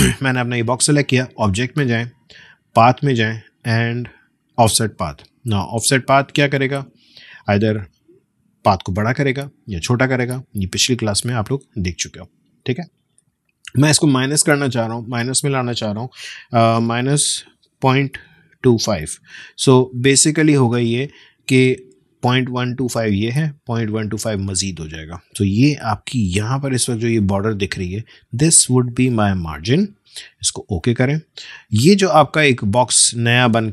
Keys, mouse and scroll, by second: 1.6-16.9 drag, 16.9 -, 18.3-19.5 typing, 30.6-33.7 drag.